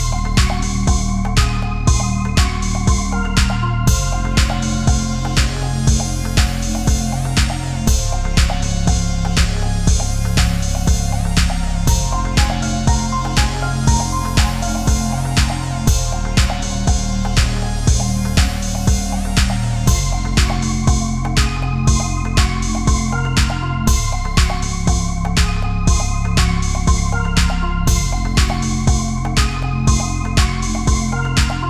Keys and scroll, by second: 5.0 ctrl+=, 5.1 space, 9.0 Up, 9.1 Right, 9.3 Up, 9.9 ctrl+-, 13.9 Left, 14.2 Down, 14.3 Left, 15.1 ctrl+=, 15.3 space, 16.4 ctrl+-, 18.3 ctrl+-, 19.7 ctrl+=, 19.8 space, 20.8 ctrl+=, 21.8 Left, 22.9 Up, 23.4 Down, 25.2 ctrl+0, 26.9 ctrl+=, 26.9 space, 29.1 ctrl+z, 29.6 ctrl+z, 30.3 ctrl+z.